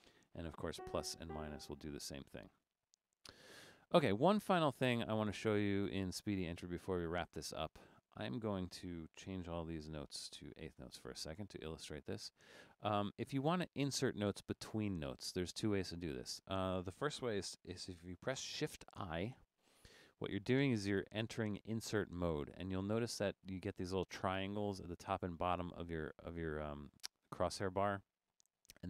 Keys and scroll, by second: 0.8-1.2 typing, 8.2 Left, 9.6-10.9 typing, 19.4 shift+|.